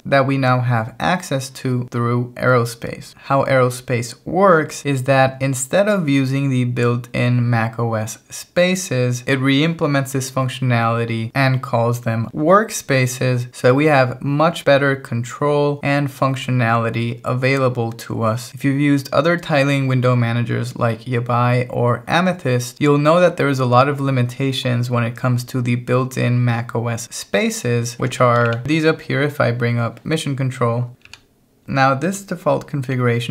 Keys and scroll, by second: 31.2 ctrl+Down, 31.6 k, 32.9-33.3 typing.